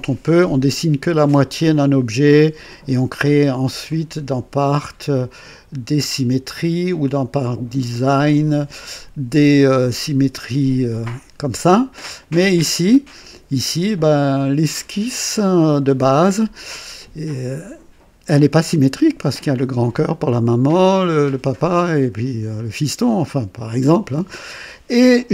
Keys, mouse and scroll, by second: 3.9 click, 5.2 click, 7.1 click, 8.2 click, 14.2 click, 15.4 click, 22.5-24.8 drag.